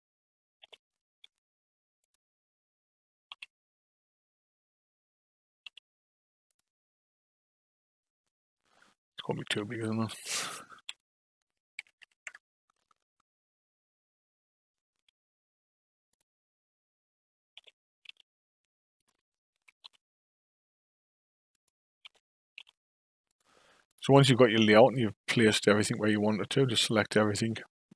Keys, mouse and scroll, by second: 0.6 g, 3.3 s, 9.6 ctrl+z, 10.8 s, 15.0 g, 17.5 g, 19.5 g, 22.0 g, 23.9 click, 26.4 a, 27.2-27.9 right drag.